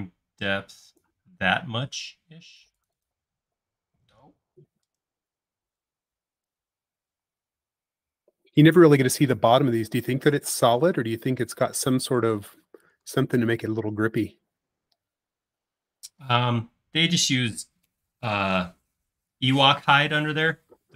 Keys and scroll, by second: 4.2 super+z, 7.1 p, 10.5 typing, 13.1 Escape, 14.4 space.